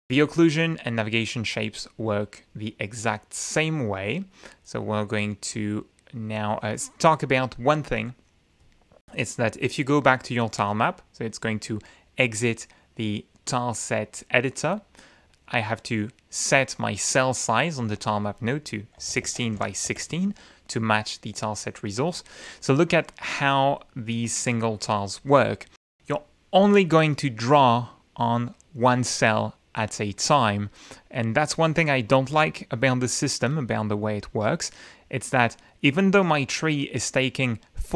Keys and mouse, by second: 0.6 click, 4.1 click, 9.9 click, 16.7 click, 17.7 click, 18.7-20.0 typing, 28.6 click, 30.1 click.